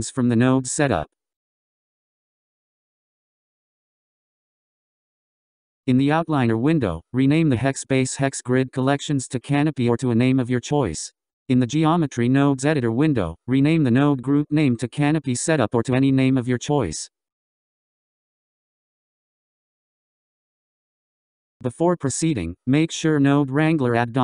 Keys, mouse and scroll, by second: 2.4-4.5 scroll down 14, 5.9 click, 6.1-9.3 drag, 11.9-15.0 drag, 23.8-24.2 drag.